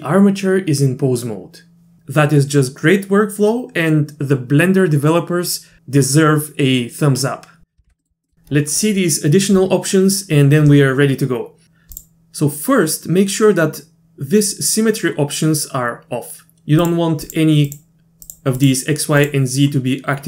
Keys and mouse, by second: 7.9 alt+r, 8.0 middle click, 8.2 middle click, 11.9 click, 16.8 click, 17.3 click, 17.7 click, 18.3 click, 18.6 click, 19.2-19.6 drag.